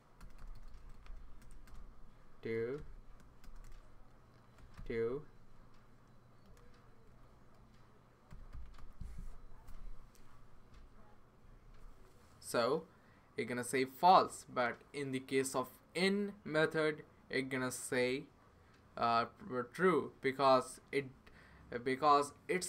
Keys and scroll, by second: 0.2 BackSpace, 0.4 BackSpace, 0.5 BackSpace, 0.7 BackSpace, 2.3-9.2 typing.